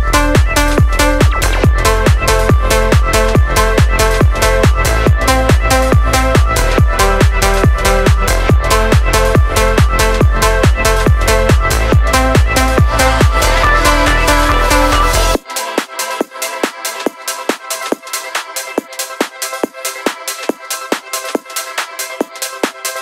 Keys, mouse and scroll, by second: 1.2 g, 2.1 z, 2.8 KP_4, 3.2 click, 8.3 g, 11.2 click, 12.1 s, 12.3 z, 15.0 ctrl+click, 15.7 s, 16.2 shift+z, 20.6 KP_Decimal, 20.9 KP_8.